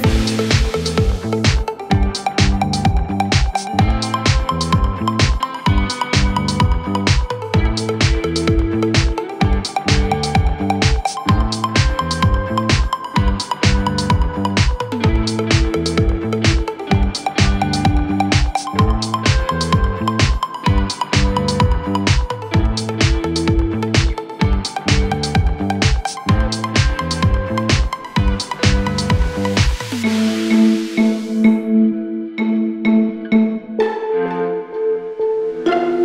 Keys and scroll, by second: 0.2 ctrl+r, 1.2 ctrl+r, 5.6 F3, 6.8 ctrl+r, 9.6 Down, 13.0 ctrl+r, 18.9 ctrl+r, 19.8 ctrl+z, 20.4 ctrl+r, 23.5 ctrl+r, 31.3 e.